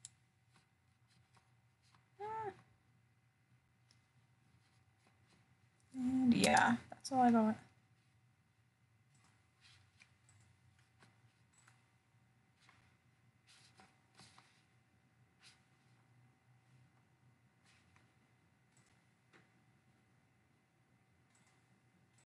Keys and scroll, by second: 1.2 ctrl+alt+o, 7.3 ctrl+alt+o, 10.7 ctrl+alt+o, 12.0 ctrl+alt+o, 14.2 ctrl+alt+o.